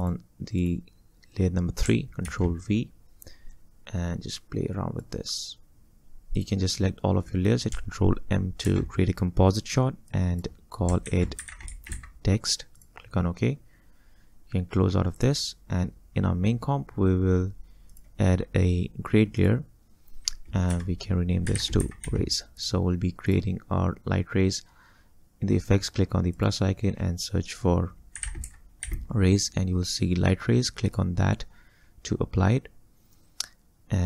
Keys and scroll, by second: 2.3 ctrl+v, 8.7 ctrl+m, 11.1 ctrl+a, 11.4 ctrl+t, 11.5-11.9 typing, 20.8 F2, 21.3-22.6 typing, 28.0-29.3 typing.